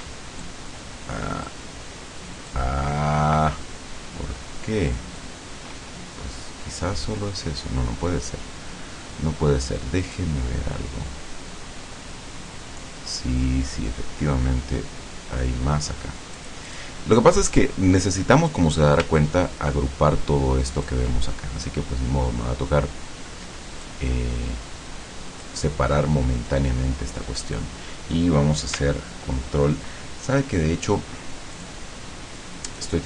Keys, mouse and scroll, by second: 0.5-1.7 shift+drag, 2.5-5.4 shift+drag, 10.1 click, 16.4 click, 17.7-18.8 drag, 19.3-21.1 ctrl+drag, 23.9-25.7 drag, 31.6 click, 32.7 click.